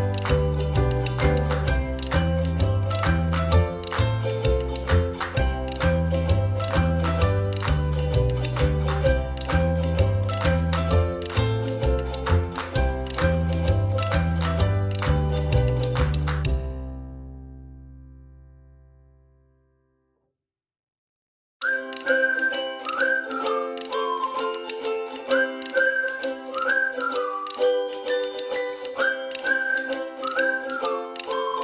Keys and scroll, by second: 10.9 p, 11.1 space, 14.7 space.